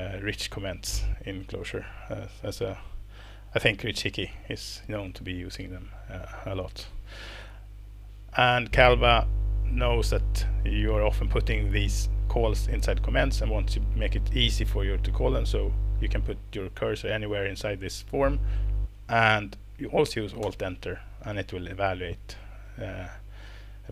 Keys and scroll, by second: 20.4 alt+Return, 22.8 Escape, 23.3 Tab.